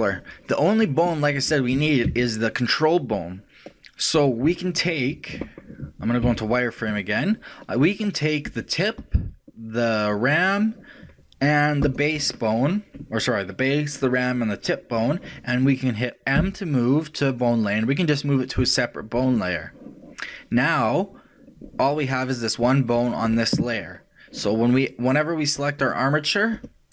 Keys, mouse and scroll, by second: 1.7 r, 6.3 z, 8.5-13.7 right drag, 16.4 m, 22.9 right click, 25.8-26.9 drag.